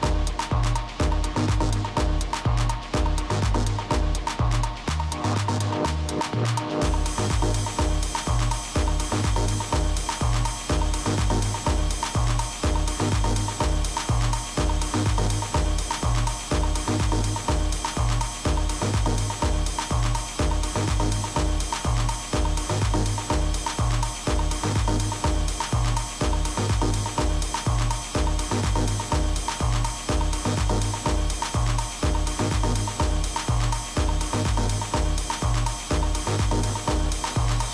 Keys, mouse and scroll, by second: 1.3 b, 2.5-4.3 drag, 6.1 a, 6.6-8.9 middle drag, 7.8 z, 18.0-24.0 middle drag, 25.5 KP_3, 26.2 z, 29.4 a, 30.7 a, 32.4 a, 32.6 a, 33.7 b, 35.7-37.6 drag.